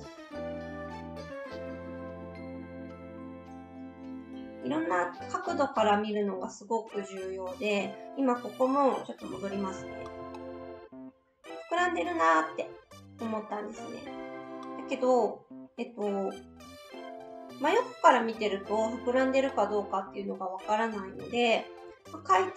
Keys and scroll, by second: 9.6 ctrl+z, 9.7 ctrl+z.